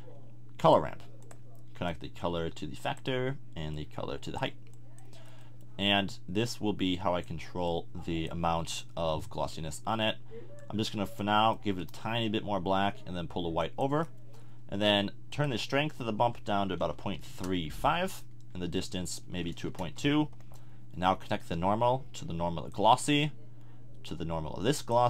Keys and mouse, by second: 1.3 click, 5.5-8.8 middle drag, 11.4 middle click, 11.7-17.3 drag, 18.8-20.1 drag.